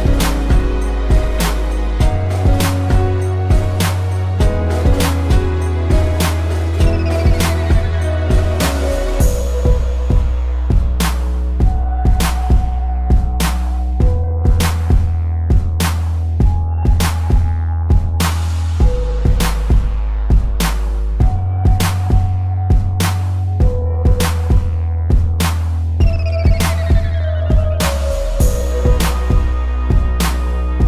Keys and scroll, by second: 0.2 Delete, 1.1 Delete, 1.7 space, 2.1 Delete, 2.4 space, 3.2 Delete, 3.9 space, 4.4 ctrl+-, 5.2 ctrl+=, 6.3 Delete, 6.6 space, 8.3 space, 8.8 p, 10.2 v, 11.8 space, 13.8 space, 15.0 a, 15.5 Delete, 17.4 ctrl+-, 17.5 ctrl+0, 17.9 z, 19.5 space, 20.8 a, 23.3 space, 25.8 z, 26.2 a, 26.4 space, 28.9 ctrl+-, 29.2 space, 29.5 v.